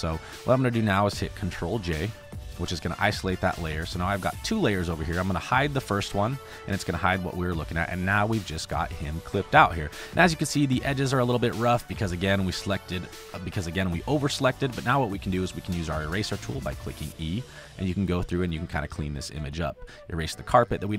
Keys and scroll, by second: 0.3 space, 2.4 ctrl+j, 11.8 e, 13.2 space, 13.9 space, 15.0 space, 15.5 space, 19.3 space.